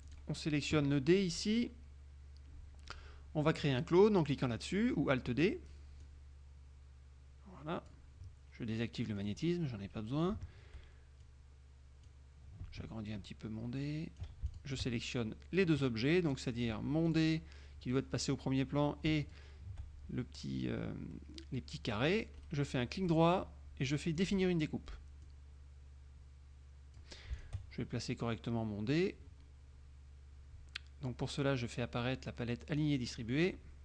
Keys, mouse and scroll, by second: 0.2 click, 5.4 click, 6.2-8.2 drag, 9.3 click, 11.4-12.4 drag, 12.9-14.5 ctrl+shift+drag, 16.6 click, 17.2 click, 19.4 shift+click, 22.6 right click, 24.4 click, 25.3-27.3 drag, 27.5 shift+click, 32.8 click.